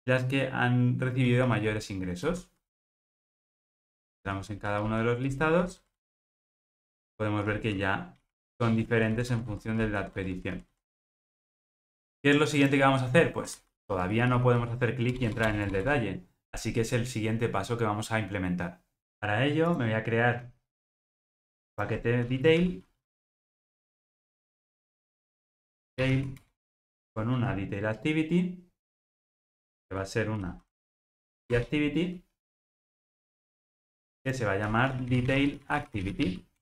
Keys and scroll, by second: 22.6 super+n.